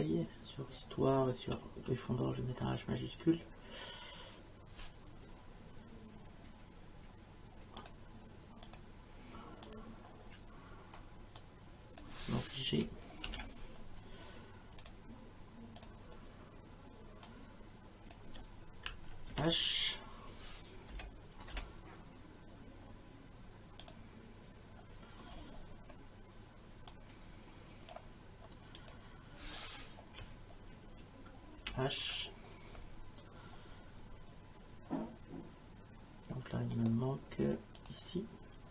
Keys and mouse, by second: 7.8 click, 11.4 click, 13.3 shift+g, 14.8 click, 17.3 click, 19.3 h, 20.9 BackSpace, 23.8 click, 26.9 click, 28.8 click, 31.6 shift+h, 36.7 click, 37.8 click.